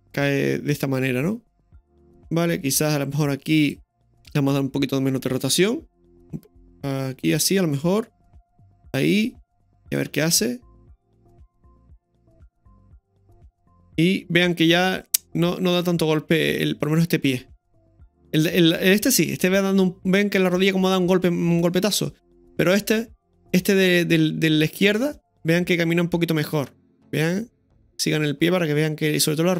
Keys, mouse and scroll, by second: 8.7 i, 9.9 click, 10.1 space, 16.4 click.